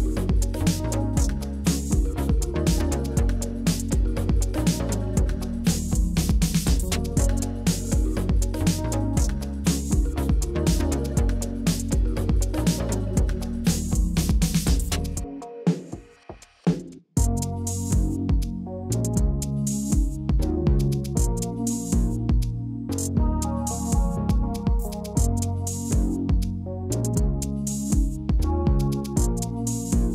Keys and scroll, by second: 1.9-3.0 typing, 7.2 ctrl+v, 9.0-10.1 typing, 22.9 ctrl+d, 25.8-29.0 typing, 27.7 Down.